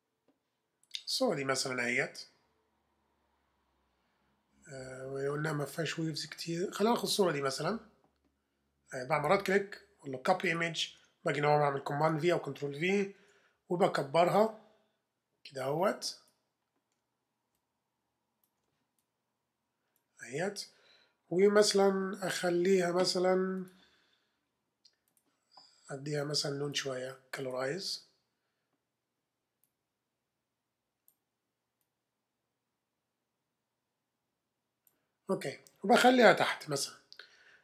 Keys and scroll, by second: 10.9 super+Tab, 12.0 super+v, 13.2 super+t, 14.2 shift+super+t, 21.2 Return, 21.5 v, 36.8 super+[.